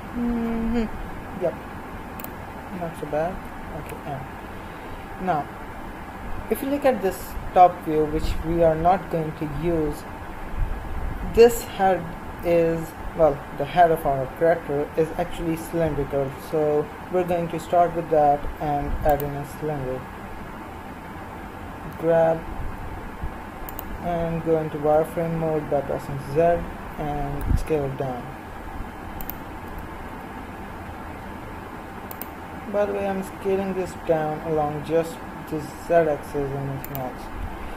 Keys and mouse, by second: 0.0-3.1 middle drag, 3.8 n, 4.4 middle click, 17.1 shift+a, 21.9 g, 25.0 z, 27.4 s, 29.7 g, 33.3 s.